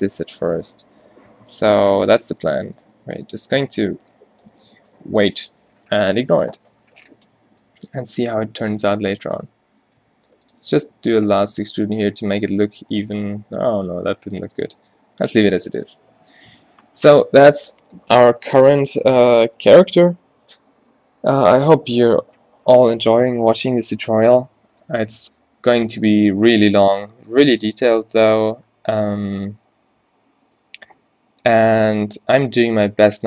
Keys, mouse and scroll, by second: 1.3 g, 2.4 Tab, 2.8 Tab, 3.1 g, 3.5 Tab, 4.2 a, 4.8 a, 8.7 Tab, 9.8 e, 10.8 s, 11.7 Tab, 13.5 ctrl+z, 17.1 a, 17.6 a.